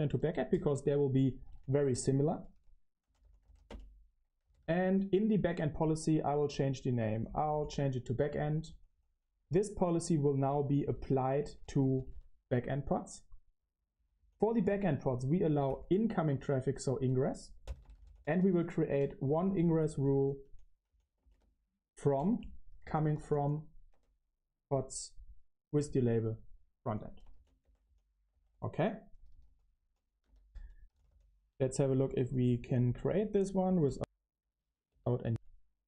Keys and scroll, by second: 0.0-23.8 typing, 5.4 Return, 15.0 Escape, 23.8 Escape, 25.3-31.7 typing, 33.0 Return, 35.2 space.